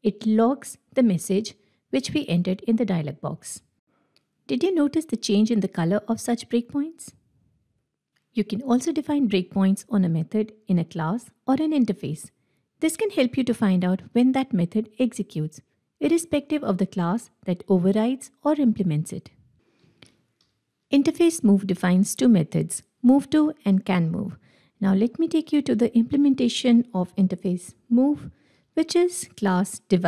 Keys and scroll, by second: 20.0 ctrl+w, 24.7 ctrl+w, 27.1 Escape, 28.5 ctrl+b.